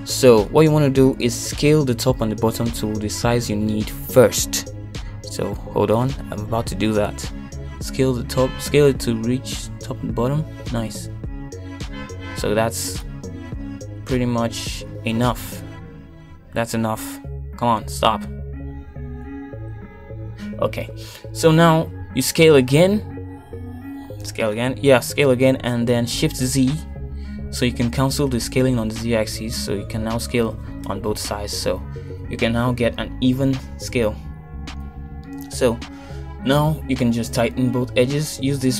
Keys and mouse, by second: 8.2 KP_1, 8.8 shift+middle click, 10.0 s, 26.8 s, 37.5 shift+z.